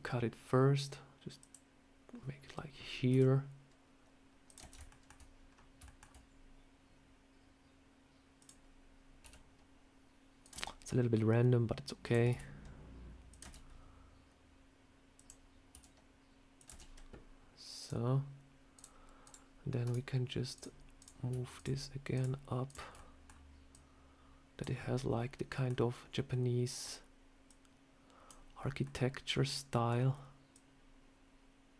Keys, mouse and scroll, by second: 1.3 click, 4.8 shift+middle click, 5.4 scroll down 2, 5.7 shift+middle click, 8.3 click, 11.9 click, 15.0 click, 17.7 click, 18.7 click, 19.1 click, 20.4 click, 20.9 click, 21.4 shift+click, 22.8 middle click, 23.6 click, 24.7 middle click, 26.2 middle click, 27.4 click, 28.4-28.9 scroll up 3, 28.7 middle click, 29.8 scroll down 1, 30.4 click.